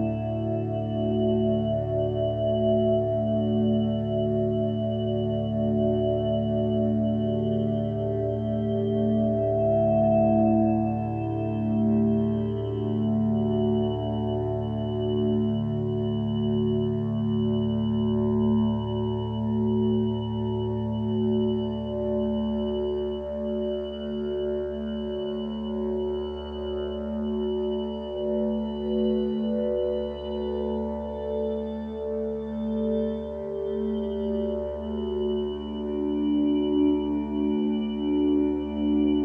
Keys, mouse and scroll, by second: 6.5 ctrl+space, 7.1 click, 7.7 ctrl+space, 8.3 space, 8.9 space, 12.3 ctrl+space, 15.1 ctrl+t, 23.6 ctrl+z, 25.8 ctrl+t, 31.5 ctrl+space, 33.8 click, 34.4 ctrl+space, 35.2 click.